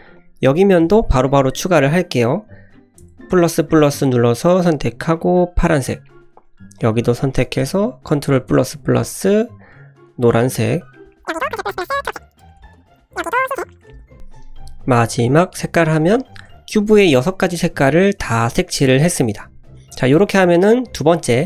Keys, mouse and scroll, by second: 0.1 click, 0.5 middle click, 3.0 ctrl+KP_Add, 5.1 click, 5.7 click, 6.0 middle click, 6.7 click, 7.2 shift+middle click, 8.2 ctrl+KP_Add, 9.6 click, 10.3 click, 10.7 scroll down 2, 10.9 middle click, 11.2 click, 11.5 ctrl+KP_Add, 11.6 ctrl+KP_Add, 11.9 click, 12.1 click, 12.2 middle click, 12.4 click, 12.7 ctrl+KP_Add, 12.8 ctrl+KP_Add, 13.1 scroll down 1, 13.4 click, 13.5 middle click, 13.8 click, 14.0 ctrl+KP_Add, 14.1 ctrl+KP_Add, 15.0 click, 15.5 click, 16.0 scroll down 1, 16.1 middle drag, 16.4 Tab, 16.5-17.0 scroll up 2, 16.9-17.3 middle drag, 17.5-18.1 middle drag, 20.3-21.4 middle drag.